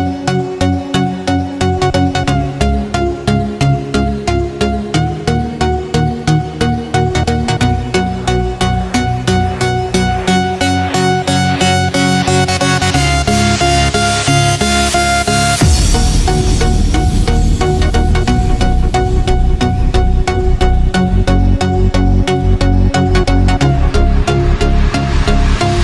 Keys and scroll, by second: 3.2 ctrl+-, 3.9 Return, 4.4 ctrl+space, 9.3 ctrl+=, 10.9 space, 14.3 3, 14.9 Return, 16.5 2, 17.0 Return, 18.4 ctrl+0, 20.5 n, 21.7 ctrl+space, 22.5 z.